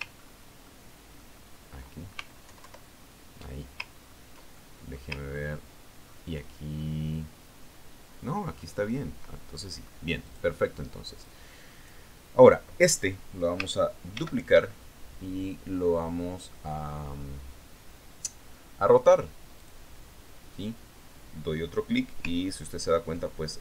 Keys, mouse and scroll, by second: 0.3-1.4 ctrl+drag, 1.6-2.1 ctrl+scroll up 2, 2.1 ctrl+middle click, 2.7-3.2 ctrl+scroll up 2, 3.2-3.7 ctrl+scroll up 1, 3.9 alt+BackSpace, 5.5-6.0 ctrl+scroll down 2, 6.0-6.6 ctrl+drag, 6.7-7.3 ctrl+scroll up 2, 7.5-8.0 ctrl+scroll down 4, 8.2-8.6 ctrl+scroll up 2, 8.8-10.0 ctrl+scroll up 2, 10.0-10.5 ctrl+scroll down 2, 10.7 ctrl+click, 11.6 click, 12.7 click, 15.6 ctrl+d, 21.1 click.